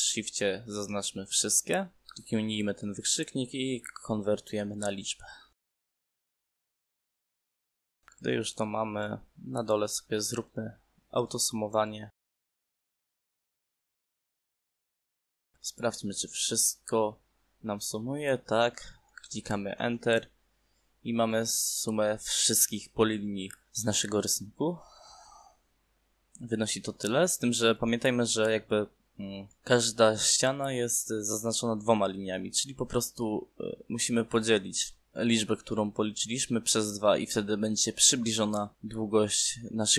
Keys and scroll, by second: 19.1 Return.